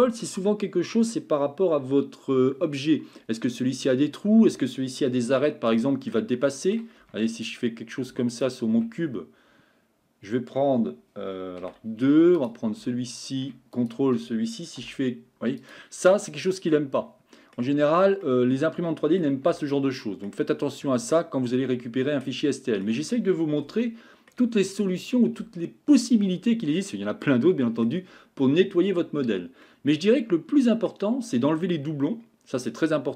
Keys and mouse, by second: 5.8-6.1 shift+middle drag, 6.4-6.7 shift+middle drag, 7.2 Tab, 11.6 2, 13.7 ctrl+click, 14.8 e, 16.1-17.6 middle drag, 18.2-19.2 middle drag, 19.5 Tab, 19.9 middle click, 22.2-22.9 middle drag, 23.8-24.3 shift+middle drag, 26.8-27.9 middle drag, 29.7-30.9 middle drag.